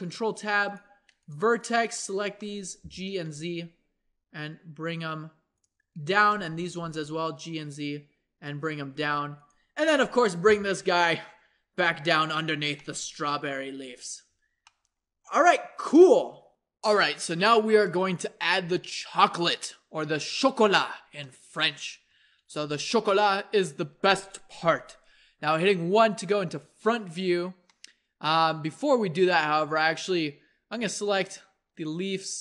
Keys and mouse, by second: 2.8 g, 6.2 click, 6.6 g, 8.9 Tab, 9.4-11.4 drag, 10.4 g, 12.8-16.5 drag, 21.2-25.7 drag, 25.7 KP_1, 27.7-29.2 drag, 29.9-32.4 middle drag.